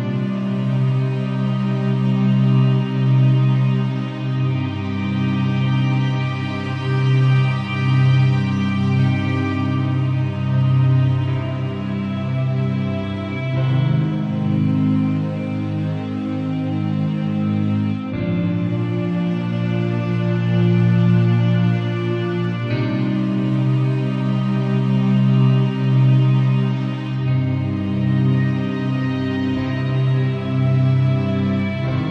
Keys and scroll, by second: 1.4 shift+Down, 4.9 shift+Right, 6.5 Return, 13.9 v, 16.3 b, 26.9 v.